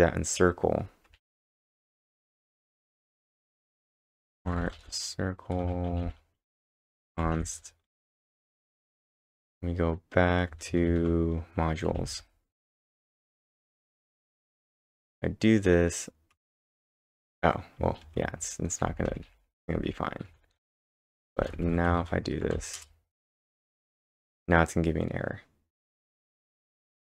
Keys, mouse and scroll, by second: 0.8-5.1 typing, 6.0 ctrl+n, 6.6 Return, 7.1-8.1 typing, 9.1 ctrl+Tab, 9.4 ctrl+Tab, 10.5 ctrl+Tab, 10.7 ctrl+Tab, 11.8-12.7 typing, 13.8 ctrl+`, 14.3 Up, 16.3 Return, 17.8 Up, 18.0 ctrl+`, 18.2-22.1 typing, 22.6 Up, 22.8 Return.